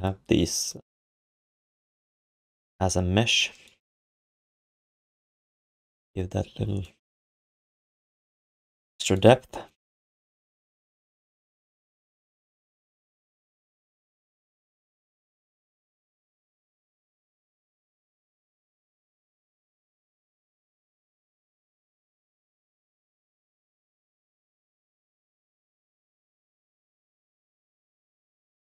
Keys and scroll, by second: 5.6 ctrl+s.